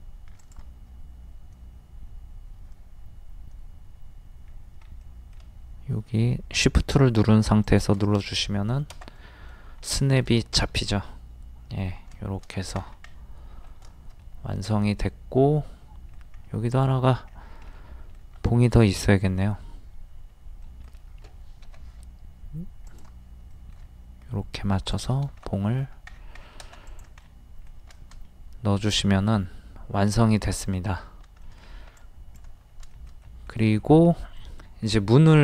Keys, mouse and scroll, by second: 0.4 ctrl+click, 4.5-5.0 shift+scroll up 1, 5.0 shift+middle click, 7.6 shift+click, 8.2 middle click, 9.5-10.0 scroll down 1, 10.0 shift+middle click, 11.7-12.1 scroll down 1, 12.1 shift+middle click, 12.5 scroll down 1, 13.1-16.4 middle drag, 16.4-16.8 scroll up 1, 16.8 middle click, 17.3 scroll up 1, 17.7 middle click, 21.6 m, 22.8 ctrl+click, 23.5 shift+middle click, 24.9 click, 25.5 middle click, 25.9 scroll down 1, 26.9 click, 27.2-31.2 middle drag, 31.4 shift+middle click, 32.0 click, 33.2 middle click, 33.8 scroll up 1, 34.4 middle click, 34.7 scroll down 1, 34.9 scroll up 1.